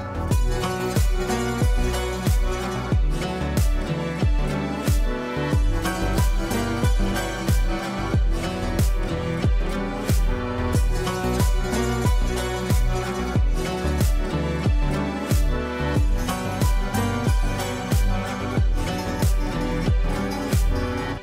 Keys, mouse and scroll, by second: 1.0 Down, 1.3 Right, 2.3 Down, 4.1-6.0 drag, 10.1 Right, 11.5-13.1 drag.